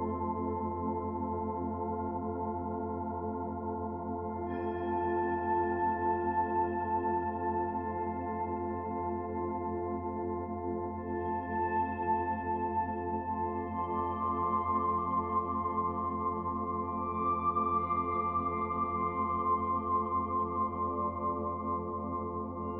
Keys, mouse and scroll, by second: 0.6 middle click, 2.3 click, 3.8 click, 6.0 shift+d, 6.8 click, 8.7 middle click, 10.5 click, 12.4 click, 13.4 middle click, 14.8 click, 15.6 middle click, 16.6 click, 18.0 r, 22.1 middle click.